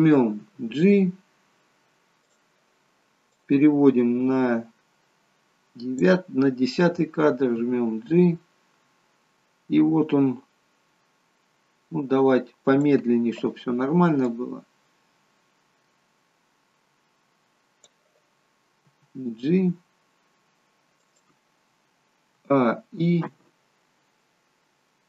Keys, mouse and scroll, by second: 0.5 g, 3.5 click, 7.6 g, 14.4 click, 19.0 g, 22.4-23.3 a, 23.3 i.